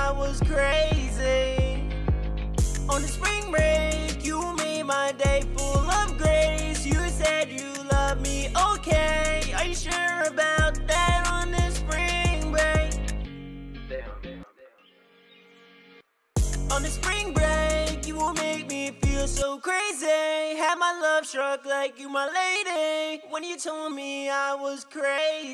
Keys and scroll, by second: 15.3 1.